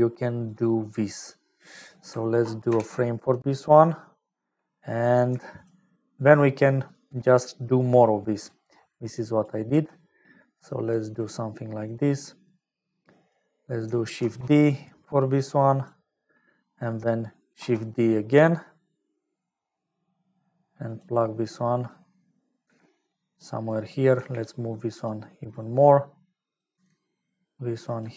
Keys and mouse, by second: 0.6-1.7 drag, 2.7 ctrl+j, 5.3 g, 6.3 click, 7.5 middle click, 9.0 click, 9.6 g, 11.6 click, 12.5 click, 14.2 shift+d, 16.4 click, 17.6 shift+d, 21.4 click, 22.8 g, 23.7 click, 24.1 g, 26.5 click, 26.7 g.